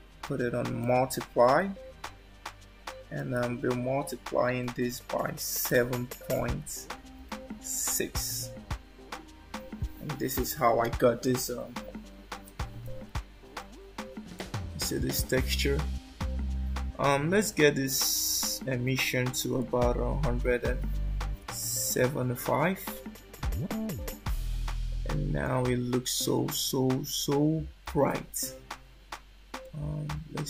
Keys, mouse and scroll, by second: 3.2 click, 14.3 middle click, 18.0 shift+middle click, 19.6 click, 26.5 shift+middle click, 29.6 click.